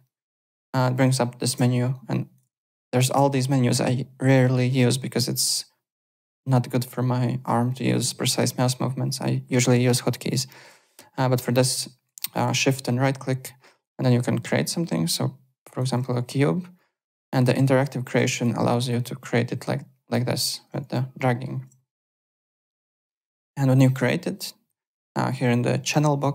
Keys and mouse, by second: 1.9 ctrl+right click, 2.6 alt+right click, 3.3 shift+right click, 11.2 shift+right click, 12.8 shift+right click, 17.3 click, 18.8 click, 21.1 alt+middle click, 24.8 click.